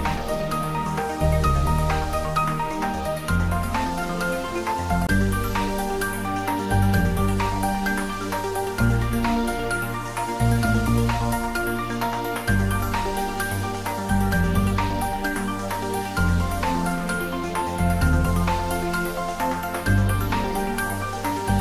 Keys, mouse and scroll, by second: 4.4 click, 6.8-8.4 scroll up 1, 11.7 click, 11.8 right click, 12.2-15.6 drag, 18.4 click, 19.5 ctrl+s, 20.4 ctrl+s.